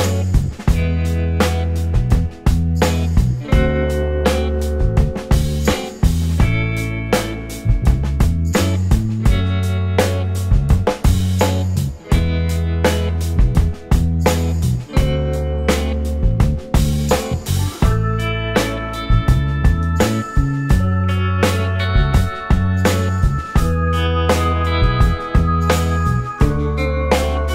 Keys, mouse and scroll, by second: 0.4 scroll down 1, 0.5 scroll up 1, 0.5 scroll down 1, 0.7 alt+click, 1.2 alt+scroll up 2, 5.0 w, 5.6 alt+click, 6.0 alt+middle click, 6.4 alt+click, 7.3 scroll down 1, 8.1 scroll up 1, 8.5 alt+click, 9.1-9.4 alt+scroll up 1, 9.4 alt+click, 9.7 alt+middle click, 10.1-10.4 alt+scroll up 1, 14.1 alt+middle click, 14.6 alt+scroll down 2, 25.8-26.1 scroll up 1, 26.4 alt+click.